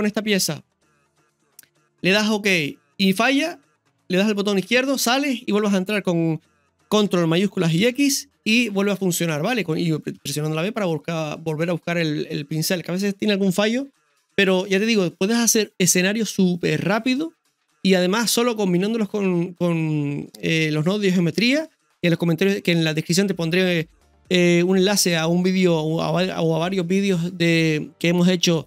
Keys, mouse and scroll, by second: 7.8 ctrl+shift+x, 9.3 ctrl+shift+x, 9.6-10.2 scroll down 1, 11.2 scroll down 2, 14.5-28.6 scroll down 1.